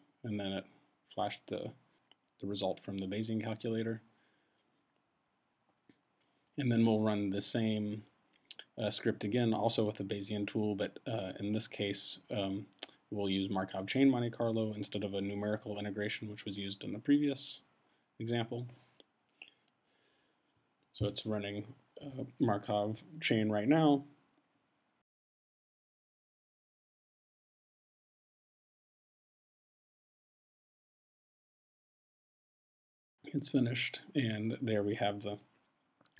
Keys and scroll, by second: 11.6 Return, 14.2 Up, 17.0 shift+m, 17.8 Tab, 18.9 Return.